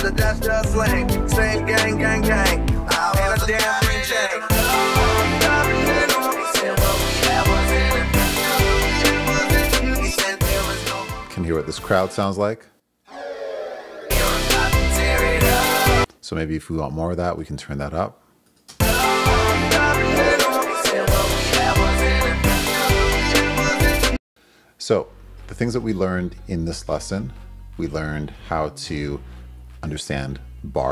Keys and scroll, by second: 16.0 space, 18.7 space, 24.1 space.